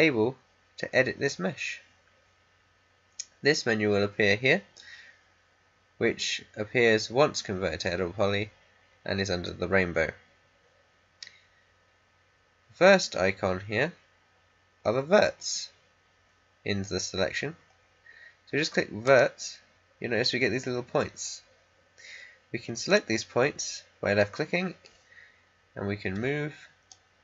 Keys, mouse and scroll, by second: 19.0 click, 22.8 click, 26.1 w, 26.8-27.2 drag.